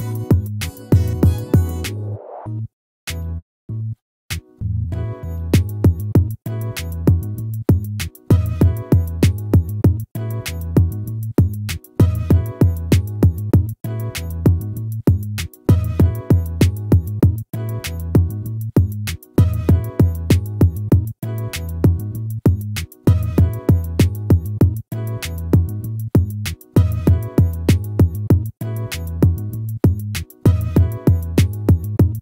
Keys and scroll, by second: 12.7 ctrl+-, 17.1 ctrl++, 19.2 ctrl+-.